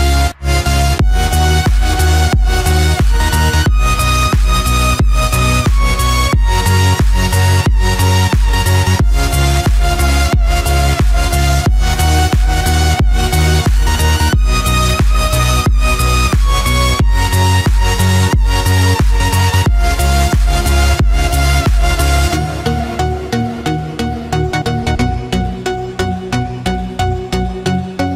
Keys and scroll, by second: 3.3 ctrl+f, 3.6 ctrl+d, 9.6 ctrl+f, 9.8 ctrl+d, 10.8 ctrl+-, 12.3 ctrl+=, 18.9 ctrl+f, 19.1 ctrl+d, 26.6 ctrl+f, 27.7 ctrl+d.